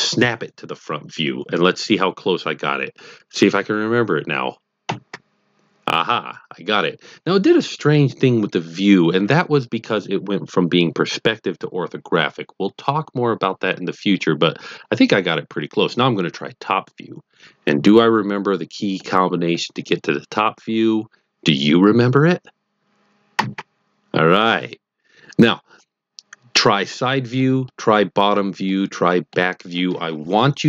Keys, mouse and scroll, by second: 4.8 KP_1, 15.8 middle click, 17.0-18.9 middle drag, 23.3 KP_7, 26.5-27.4 middle drag, 28.6-29.3 middle drag.